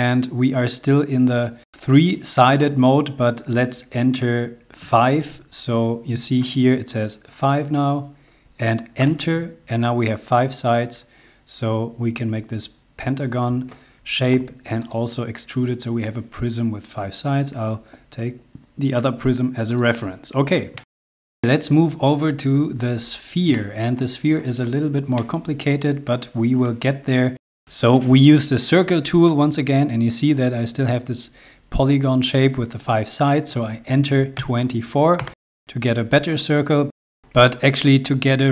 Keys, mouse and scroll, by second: 0.1 scroll up 1, 0.6-1.9 scroll down 1, 5.1 typing, 9.3 Return, 10.8 click, 13.2 click, 14.5 p, 15.0 click, 20.0 click, 20.4 scroll down 1, 20.9 shift+Tab, 21.0 middle click, 21.4 scroll down 1, 22.4 scroll up 1, 23.5 shift+middle click, 23.9-25.1 shift+scroll up 2, 25.1 middle click, 31.0 scroll up 1, 31.5 scroll down 1, 33.9-34.3 typing, 36.3 scroll up 1, 36.9 scroll down 1, 37.1 c.